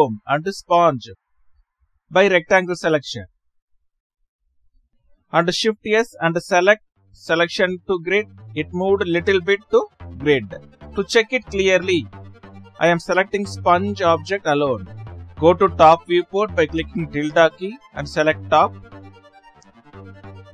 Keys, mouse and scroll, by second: 4.9 Left, 7.2 shift+s, 8.8 click, 9.8 Left, 10.5 Left.